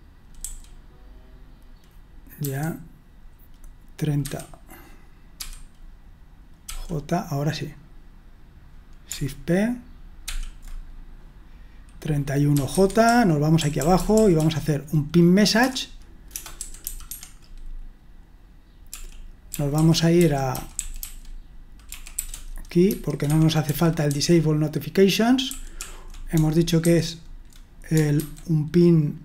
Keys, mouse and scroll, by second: 0.4 typing, 5.1-6.6 typing, 12.7-14.4 typing, 15.6-16.8 typing, 17.1 Escape, 19.2-24.2 typing, 23.3 Escape, 25.4-25.7 typing, 26.8 super+1, 28.2 super+2.